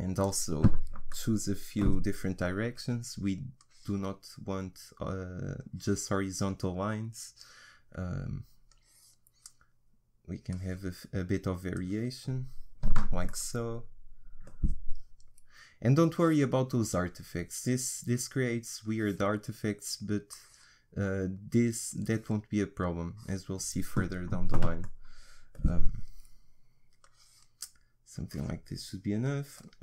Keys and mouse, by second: 1.1 middle click, 3.6-5.5 drag, 5.6-7.6 drag, 8.7-13.3 drag, 13.3-16.0 middle drag, 16.0-17.8 drag, 18.8-24.9 drag, 24.9-27.0 middle drag, 27.0-29.8 drag.